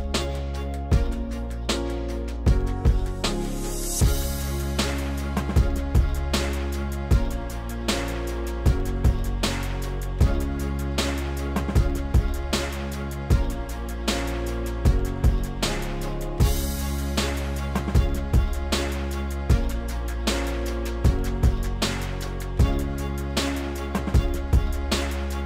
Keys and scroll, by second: 1.9 s, 21.6 b.